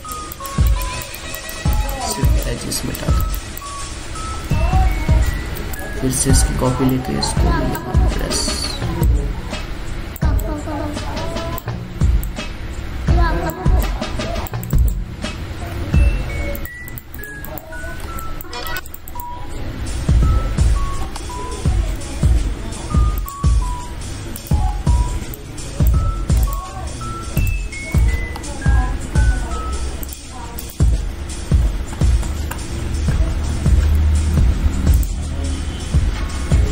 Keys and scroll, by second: 6.2 ctrl+j, 6.5 ctrl+t, 28.9 ctrl+z.